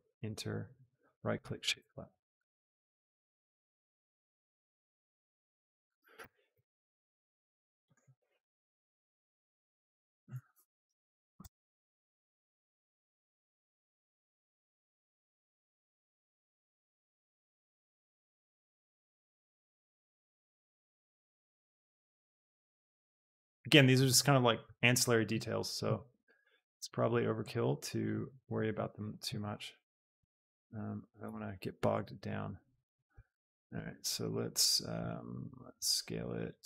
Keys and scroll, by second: 1.6 Tab, 4.5 Tab, 6.3 ctrl+KP_Add, 7.8 KP_Add, 8.5 Tab, 10.0 Tab, 10.7 ctrl+KP_Add, 14.5 ctrl+KP_Add, 18.5 Tab, 22.2 shift+Tab, 23.3 Tab, 26.2 ctrl+KP_Add, 28.8 Tab, 31.4 shift+Tab.